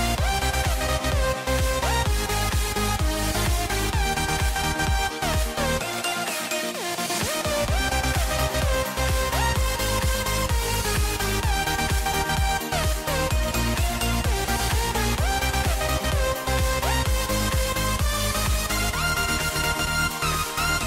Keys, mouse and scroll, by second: 8.7-17.8 middle drag, 17.8 alt+shift+click.